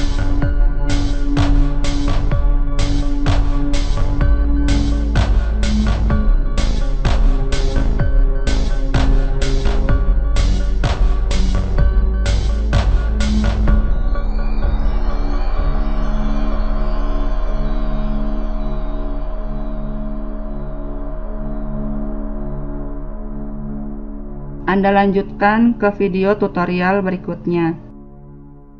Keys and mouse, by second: 0.4 e, 1.8 e, 3.1-5.0 middle drag, 5.0 e, 5.8 e, 7.2 e, 9.4 KP_3, 9.7 middle click, 10.3-12.1 middle drag, 12.3 middle click, 12.6 click, 14.0 a, 14.1 b, 14.8 click, 15.7 a, 16.5 click, 17.2 a, 17.4 b, 18.0-19.0 drag, 19.3 a, 19.4 b, 20.1 click, 20.7 a, 21.0 b, 21.3-23.0 drag, 23.0 a, 23.2 b, 23.5 click, 24.1 a, 24.8-27.3 middle drag, 25.7 KP_1.